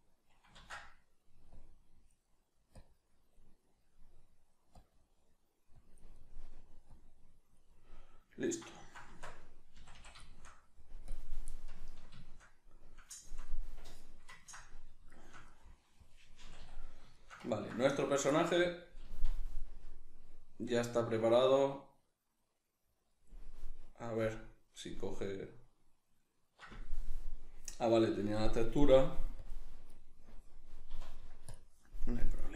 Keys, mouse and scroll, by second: 0.6 ctrl+z, 0.8 middle click, 1.6 click, 2.2 middle click, 2.8 click, 3.6-4.8 middle drag, 4.8 click, 5.2 middle click, 5.8 click, 6.2 middle click, 6.9 click, 7.7-28.2 middle drag, 9.1 Tab, 9.8 a, 11.1 click, 16.4 a, 19.0 z, 28.2 right click, 29.4 click, 30.9 z, 32.3 click.